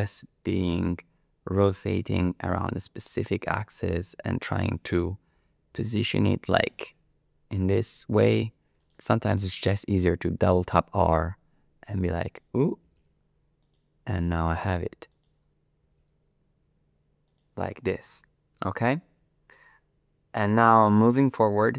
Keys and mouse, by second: 0.5 r, 2.1 x, 3.0 click, 3.5 r, 4.0 z, 4.6 click, 5.3 r, 5.7 y, 6.7 click, 7.6 r, 8.3 x, 8.8 click, 10.4 r, 10.6 r, 12.2 click, 12.9 r, 13.0 r, 13.6 click, 14.2 r, 15.1 click, 15.8 r, 16.0 r, 17.3 click.